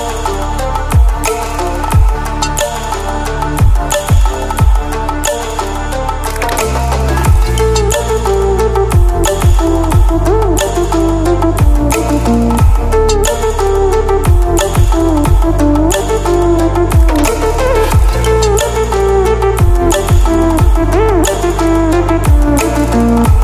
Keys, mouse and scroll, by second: 1.4-1.9 ctrl+alt+scroll up 2, 2.6-3.0 ctrl+alt+scroll down 2, 3.0 ctrl+alt+scroll up 2, 4.5-8.9 drag, 15.0 ctrl+w, 17.3 ctrl+w, 18.5 click, 22.0 ctrl+w.